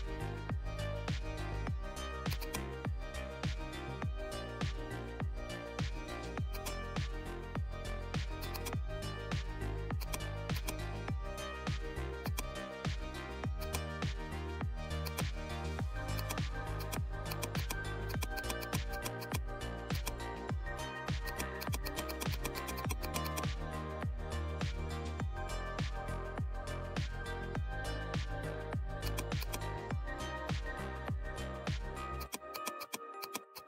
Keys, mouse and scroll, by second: 6.4-8.4 drag, 9.9-12.1 drag, 14.3 right click, 15.0 click, 23.6-23.9 scroll down 1, 27.2 right click, 28.9 click, 29.0 click, 30.3 space, 30.4 scroll down 1, 30.6 space, 31.2 alt+scroll down 1, 32.2 click.